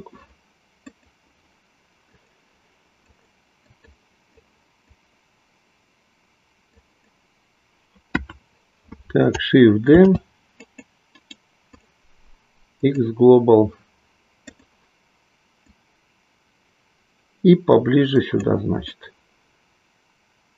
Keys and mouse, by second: 0.9 click, 2.1 click, 3.1 click, 3.9 click, 4.3 click, 8.0 KP_1, 10.0 shift+d, 11.1-14.0 right drag, 14.5 click, 15.6-18.3 drag, 18.9-20.5 middle drag.